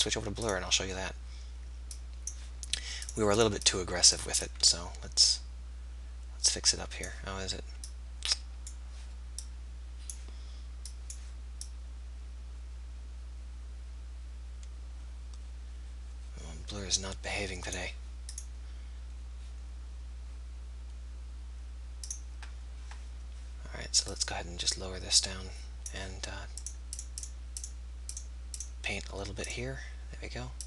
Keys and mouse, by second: 25.8 click.